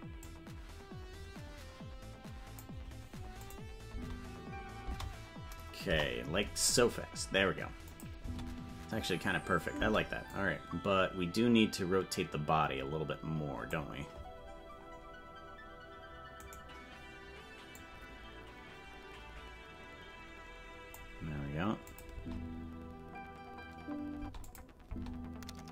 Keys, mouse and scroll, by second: 0.2-2.6 drag, 3.4 click, 3.9 space, 5.8 space, 5.8 KP_0, 7.9 click, 8.2 space, 10.3-13.8 drag, 17.7-20.9 drag, 17.7 right click, 21.9 click, 22.1 space, 24.5 click, 24.5 space, 24.8 space.